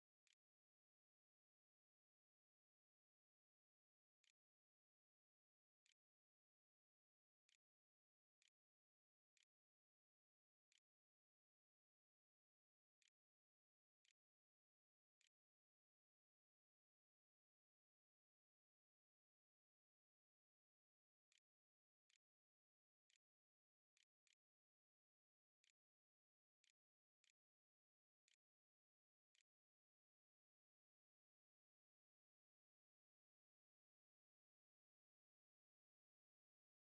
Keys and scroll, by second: 0.0-1.9 typing, 3.1 Return, 3.8 Up, 5.3 Return, 6.1-10.0 typing, 10.3 Tab, 11.2-16.6 typing, 20.2-23.8 typing, 24.9-28.1 typing, 29.1-30.5 typing.